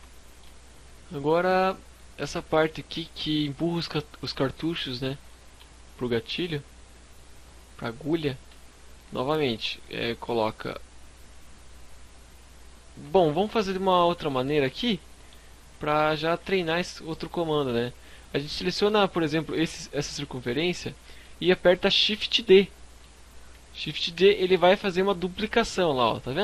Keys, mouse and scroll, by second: 0.0 scroll up 1, 0.5 scroll up 2, 1.3 click, 1.7-2.0 scroll down 3, 3.9-4.5 scroll up 3, 4.3 shift+middle click, 4.9 scroll down 1, 5.1 shift+middle click, 6.5-6.8 scroll up 2, 8.8-9.4 scroll up 4, 9.3 shift+middle click, 9.8 scroll down 1, 11.0-11.8 scroll down 4, 12.2 shift+middle click, 12.6 scroll up 2, 13.9 scroll up 2, 13.9 KP_Decimal, 14.2 KP_5, 14.8 z, 15.0 middle click, 15.0 scroll up 1, 15.4 Tab, 15.6 scroll up 2, 15.9 Tab, 16.2 right click, 16.2 scroll up 1, 16.4 Tab, 17.5 alt+right click, 18.1 middle click, 19.2 middle click, 19.7 middle click, 19.7 scroll up 1, 23.0 shift+d.